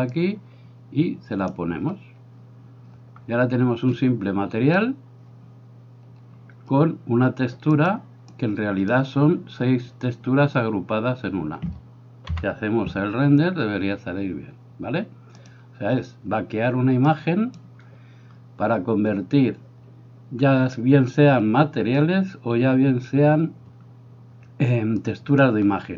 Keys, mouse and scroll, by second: 0.2-1.5 drag, 7.8-9.0 drag, 12.6 F12, 17.2 click, 25.1 click.